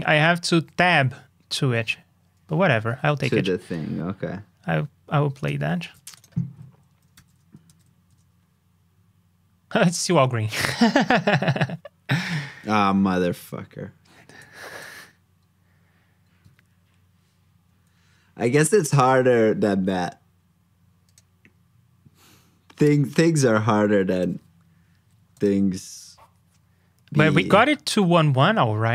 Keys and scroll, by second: 2.7 super+s, 5.8 super+c, 6.4 super+v, 7.1 ctrl+c, 7.6 super+v.